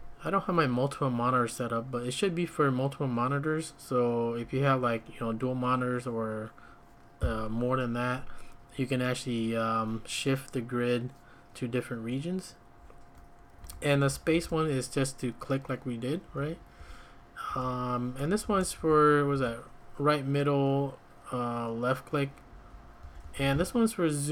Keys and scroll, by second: 4.4 Escape, 13.6 j, 14.3 shift+v, 16.3 Escape, 16.4 Escape, 16.8-19.3 typing, 22.5 Escape, 22.7 Escape, 23.0 j, 23.2 j, 23.4 j.